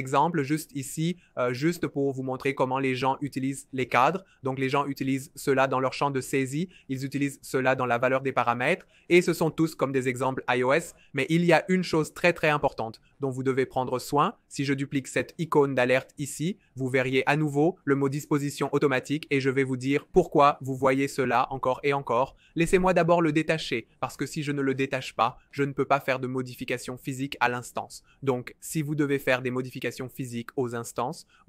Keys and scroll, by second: 22.9 alt+super+b.